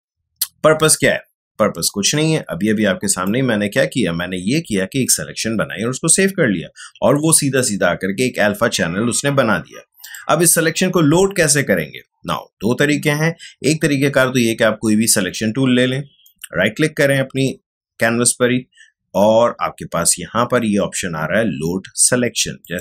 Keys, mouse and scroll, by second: 0.8-5.7 drag, 10.0 click, 16.2 right click, 22.6 click.